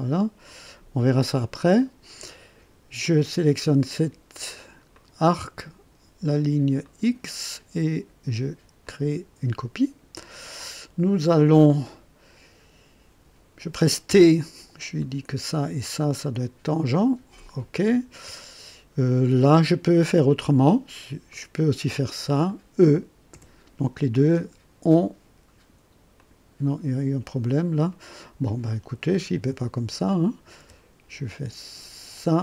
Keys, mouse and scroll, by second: 0.5 right click, 4.9 click, 6.8 click, 8.8 click, 14.1 t, 15.0 click, 16.2 click, 17.3 click, 19.9 right click, 21.3 click, 22.4 click, 23.3 e, 26.1 click, 27.9 right click, 29.1 Escape, 30.1 click, 30.6 t, 32.1 click.